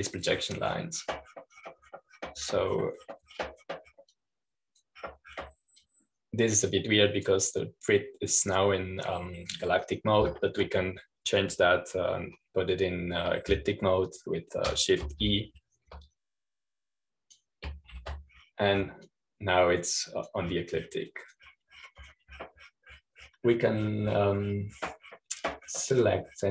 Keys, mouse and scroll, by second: 0.0-2.7 drag, 2.7-4.9 scroll down 1, 4.9-6.0 scroll down 1, 6.0-7.4 drag, 7.4 scroll down 1, 7.7-12.3 drag, 17.1 shift+e, 18.0-19.8 drag, 19.8 shift+e, 20.9-22.8 drag, 23.0-24.0 drag.